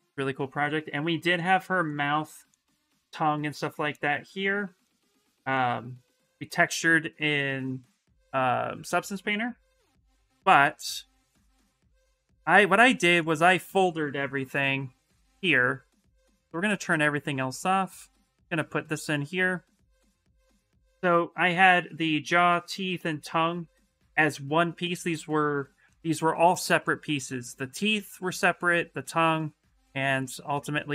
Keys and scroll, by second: 14.1 shift+m.